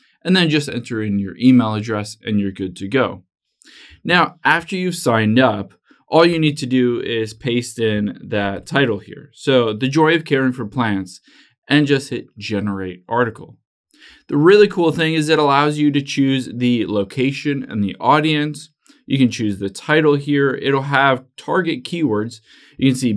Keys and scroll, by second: 4.4 super+h, 8.8 super+v.